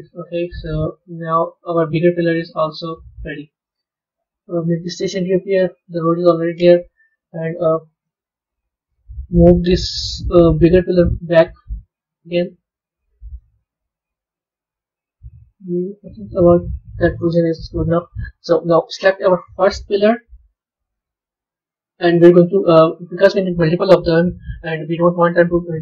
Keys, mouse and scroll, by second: 0.9 Tab, 1.2-2.8 middle drag, 2.8 scroll down 2, 4.5 click, 6.0-7.1 middle drag, 7.1 KP_3, 7.5-8.4 scroll up 1, 8.4-9.8 middle drag, 9.8 g, 13.3-16.4 middle drag, 17.4 KP_1, 18.4 KP_3, 19.2-19.7 scroll down 2, 19.7-20.4 scroll down 1, 20.4 click, 21.6 click.